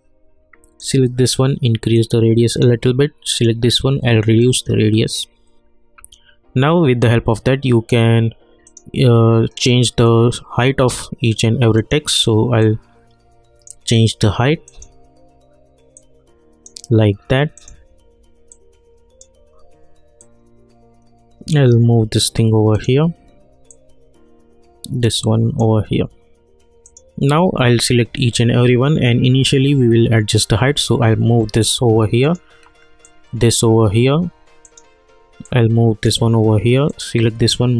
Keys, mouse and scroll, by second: 8.6-26.8 drag, 30.8-37.7 drag.